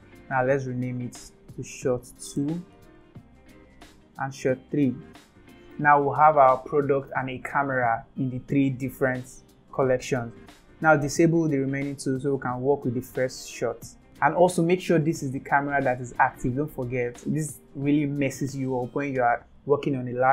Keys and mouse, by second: 0.8 F2, 2.3 BackSpace, 2.5 BackSpace, 3.0 BackSpace, 6.4 click, 6.8 click, 7.3 click, 8.6-11.2 drag, 12.0 click, 12.7 click.